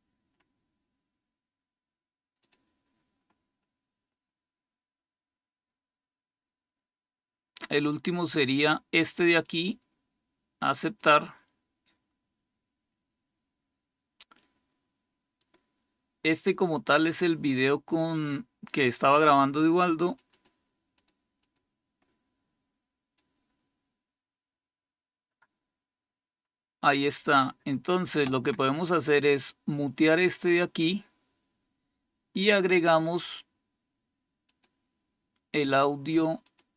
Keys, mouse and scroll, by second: 0.2-0.8 scroll down 2, 2.3 click, 3.5-5.0 scroll down 3, 9.3 click, 10.8 click, 15.3-17.9 drag, 19.9 click, 20.2 click, 20.9 click, 21.3 click, 21.9 click, 23.1-27.3 drag, 30.4 click, 34.3 click, 36.3 click.